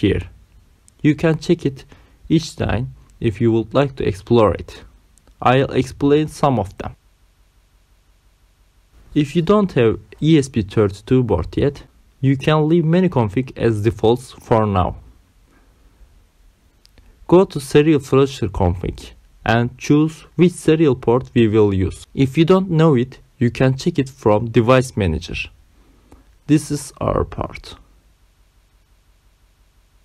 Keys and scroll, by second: 15.3 Down, 20.5 Return, 25.9 Return, 26.8 BackSpace, 28.2 Caps_Lock, 28.4 c, 29.0 o, 29.6 m.